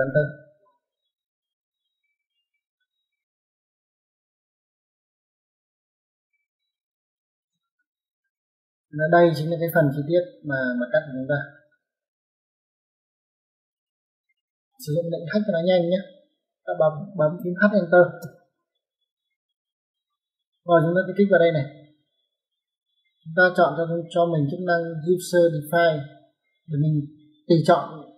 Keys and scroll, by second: 4.1 Escape, 7.3 e, 7.4 space, 17.4 h, 17.9 space.